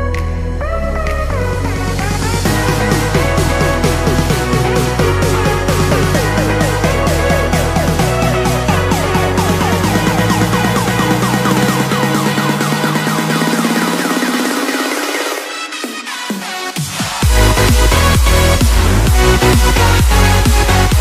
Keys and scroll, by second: 2.9 ctrl+-, 3.8 ctrl+=, 4.0 space, 4.8 space, 5.4 ctrl+=.